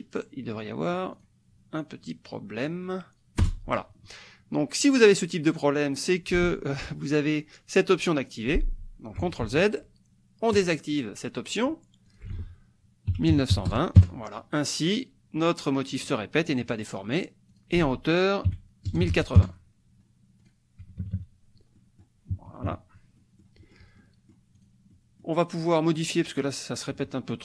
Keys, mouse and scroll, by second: 1.1 click, 2.6 click, 3.4 Return, 9.4 ctrl+z, 10.6 click, 12.2 ctrl+click, 12.3 ctrl+a, 13.1 KP_1, 13.3 KP_9, 13.6 KP_2, 14.0 KP_Enter, 17.5 click, 17.8 ctrl+a, 18.6 KP_1, 19.0 KP_8, 19.4 KP_Enter, 20.4 click, 21.0 KP_Subtract, 21.8 click, 22.6 KP_Subtract, 23.2 click, 24.0 click, 24.6 click, 24.9 click.